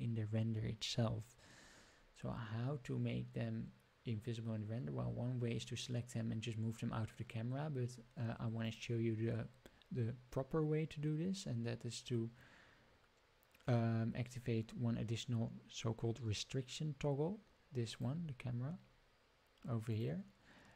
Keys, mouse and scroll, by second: 8.6-20.0 drag.